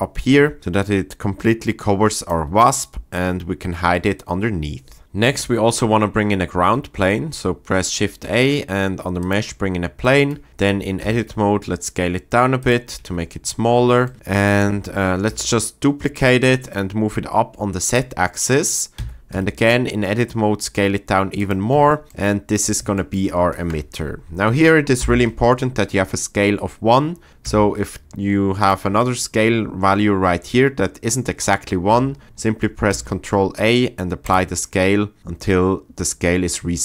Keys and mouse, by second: 2.2 shift+click, 2.6-3.3 middle drag, 6.5 shift+a, 10.5 Tab, 11.0 s, 13.0 Tab, 15.2 shift+d, 18.9 Tab, 19.3 s, 21.4 click, 21.7 Tab, 25.0 n, 27.4 s, 28.6-30.0 drag, 32.9 ctrl+a.